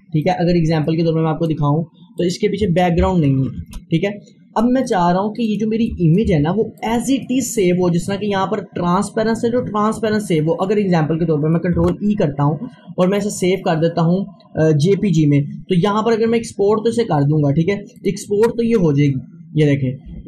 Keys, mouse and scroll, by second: 0.3-2.2 drag, 3.6 shift+Page_Down, 4.9 click, 6.3 Delete, 6.8-9.8 drag, 11.5 click, 11.8 e, 18.0 click.